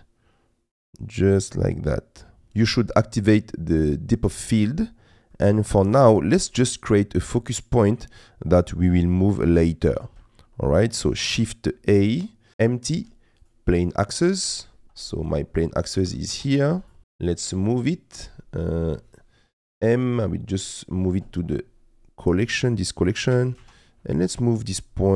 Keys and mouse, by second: 5.3 middle click, 6.8 middle click, 8.2 middle click, 11.4 shift+a, 14.8 KP_Decimal, 16.0 g, 16.3 shift+z, 17.7 shift+middle click, 19.5 m, 23.3 g, 23.6 shift+z.